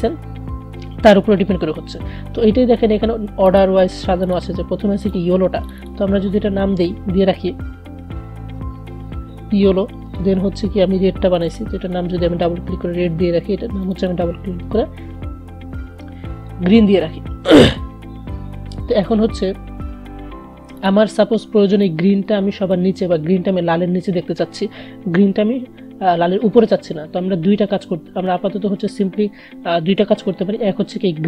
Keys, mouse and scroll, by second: 3.6 click, 7.2 shift+y, 7.6 e, 8.7-9.8 typing, 11.3 click, 12.3-13.4 typing, 13.4 Return, 13.9 click, 14.6-16.7 typing, 19.2 Return, 20.7 click, 22.0-31.2 drag.